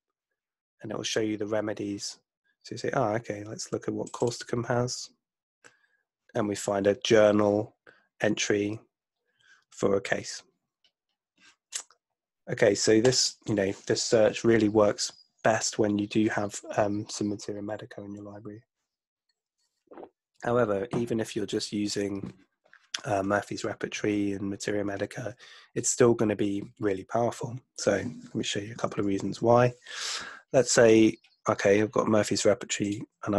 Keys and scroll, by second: 29.0 super+1.